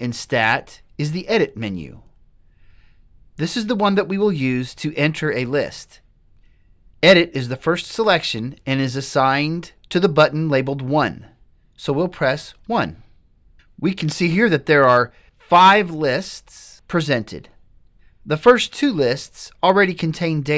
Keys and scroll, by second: 12.8 1.